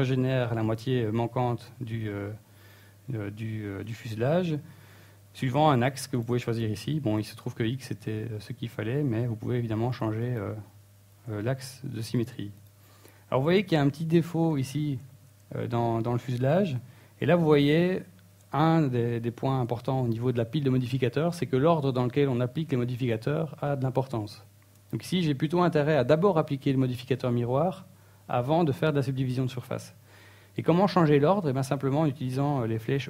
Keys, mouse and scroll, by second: 3.4 middle click, 4.3-4.6 scroll up 2, 4.6 middle click, 7.4 middle click, 10.3 click, 10.6 click, 11.0 click, 11.7 click, 12.7 middle click, 13.1 scroll up 1, 14.3 click, 14.6 click, 15.0 middle click, 16.4 click, 16.8 click, 17.7 middle click, 18.1 middle click, 18.6 scroll up 3, 20.5 middle click.